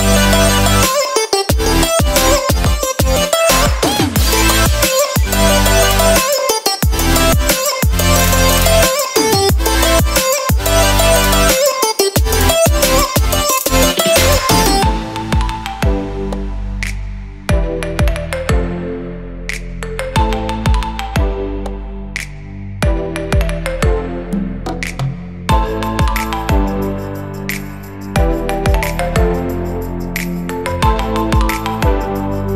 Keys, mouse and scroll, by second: 0.4 alt+a, 1.2 click, 2.4 g, 4.9 alt+a, 5.8 click, 7.5 g, 9.7 middle click, 11.4 alt+a, 12.2 click, 12.9 scroll, 13.9 shift+g, 15.9 alt+a, 17.0 click, 18.0 g, 20.9 click, 21.7 g, 24.1 click, 24.7 g, 26.1 alt+a, 27.3-28.5 shift+scroll, 29.2-30.3 shift+scroll, 30.0 click, 30.9 shift+g.